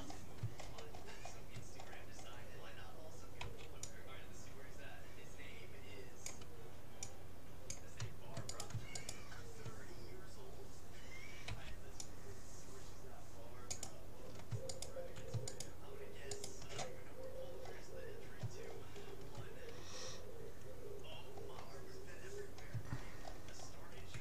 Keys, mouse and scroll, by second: 3.4 c, 9.1-10.7 right drag, 11.5 c, 13.7-15.5 drag, 14.7-17.9 right drag, 17.5-20.9 middle drag, 22.5-24.2 middle drag.